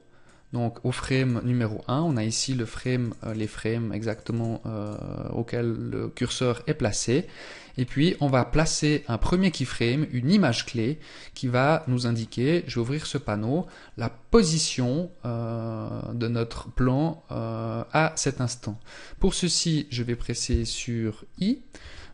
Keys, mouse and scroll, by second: 3.7 click, 7.2 scroll up 2, 8.7-10.5 scroll down 1, 10.9 scroll down 1, 12.1 n, 20.8 i.